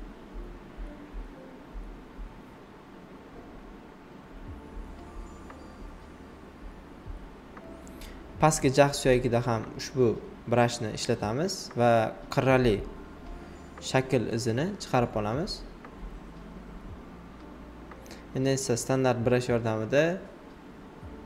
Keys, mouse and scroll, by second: 1.6-2.9 drag, 7.0 alt+right click, 7.9 alt+right click, 8.6 click, 12.5 shift+click, 13.7 alt+right click, 15.5 alt+right click, 18.9-21.2 typing, 20.5 click.